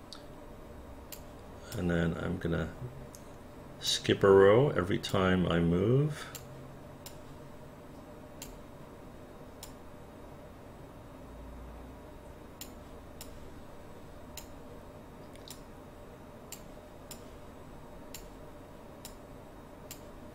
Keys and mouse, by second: 1.7-3.9 drag, 5.1-6.4 drag, 9.6-12.6 drag, 15.5-16.5 drag, 19.0 click.